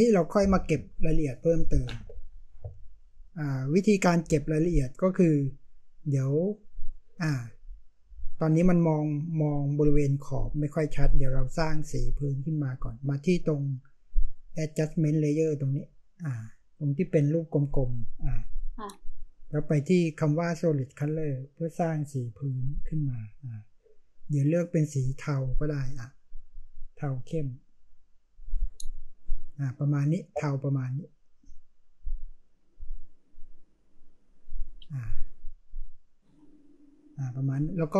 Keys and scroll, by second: 5.2 space.